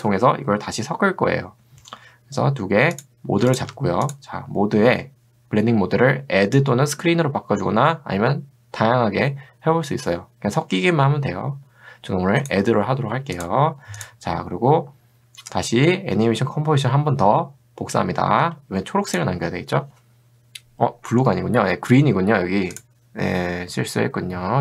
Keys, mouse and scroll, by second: 3.0 click, 3.5 shift+click, 18.4 ctrl+d, 19.1 click, 22.8 click.